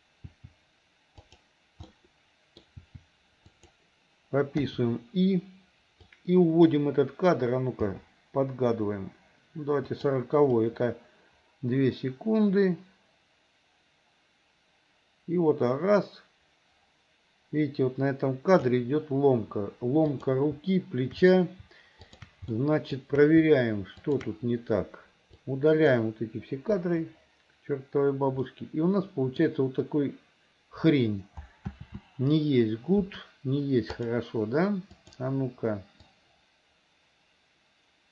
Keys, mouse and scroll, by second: 0.3 r, 1.9 middle click, 2.8 r, 4.7 i, 6.1 click, 7.9 g, 10.7-18.8 drag, 20.1 click, 22.6 shift+middle click, 24.1 shift+click, 25.4 click, 25.6 click, 26.8 Delete, 28.5 middle click, 31.8 ctrl+z, 33.9 click, 35.0 click, 36.2-38.1 drag.